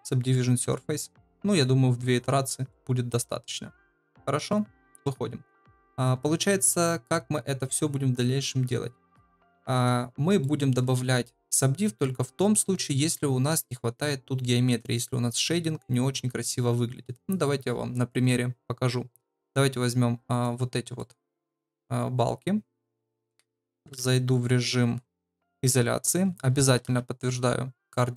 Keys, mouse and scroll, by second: 0.0 click, 2.2-2.7 middle drag, 3.1-3.8 middle drag, 4.9 KP_Divide, 10.4-10.7 shift+middle drag, 20.9-21.7 middle drag, 21.7 drag, 21.9 middle click, 24.0 Tab, 24.4 Tab, 26.7 ctrl+a.